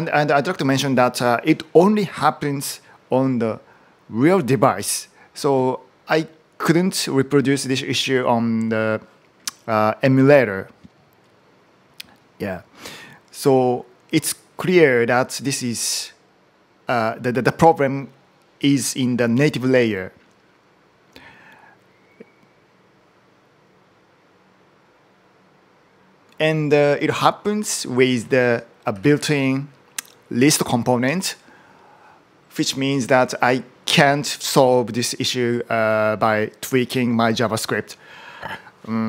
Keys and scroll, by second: 28.4-29.6 typing.